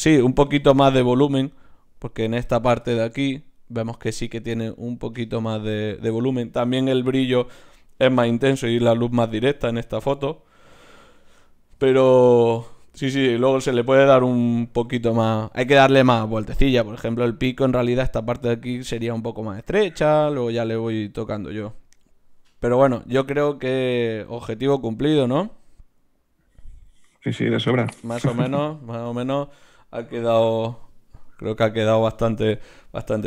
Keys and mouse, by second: 32.3 shift+z.